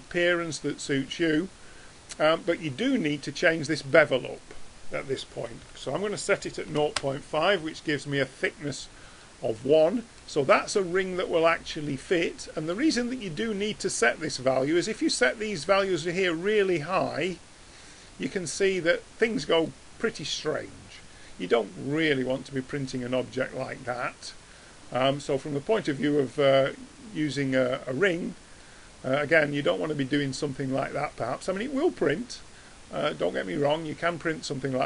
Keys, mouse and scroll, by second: 3.8-5.6 drag, 5.6 BackSpace, 9.3-10.6 middle drag, 21.5-23.0 middle drag, 26.8-28.7 drag, 30.3-30.9 drag.